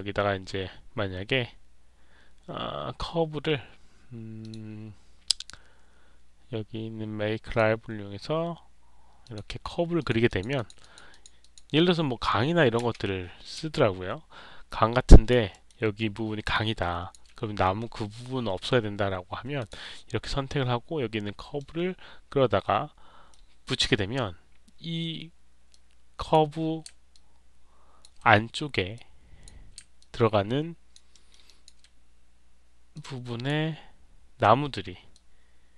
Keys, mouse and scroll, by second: 4.3 click, 7.4 click, 9.1 click, 9.9 click, 10.2 click, 10.5 click, 10.7 click, 11.0 click, 11.3 click, 13.6-15.2 alt+drag, 15.4 alt+middle click, 16.4 alt+click, 19.5 click, 21.5-23.2 middle drag, 25.6 click, 27.4 alt+click, 28.8 click, 30.6 alt+click, 31.0 alt+middle click, 31.4 alt+click, 32.8 click, 35.0 click.